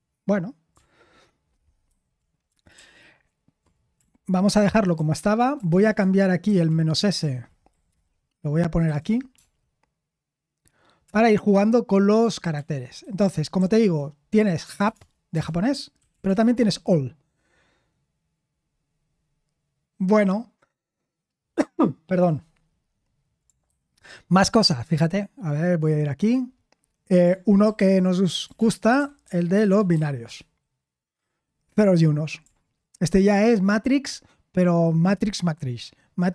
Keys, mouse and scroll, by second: 4.6 BackSpace, 4.7-5.8 BackSpace, 6.4 Left, 6.6 Left, 6.9 Left, 7.2 Left, 8.6-9.4 typing, 11.0 Return, 13.0 ctrl+c, 14.9 ctrl+p, 15.3 BackSpace, 16.1 BackSpace, 16.5 BackSpace, 28.5-29.9 typing, 30.2 Return.